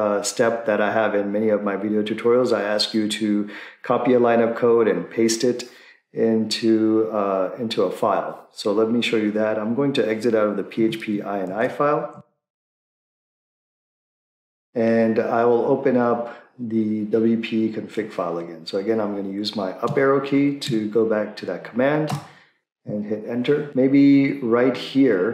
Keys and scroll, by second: 13.5-14.5 typing, 22.1 Up, 22.1 Return, 23.7 Down, 24.1 Down.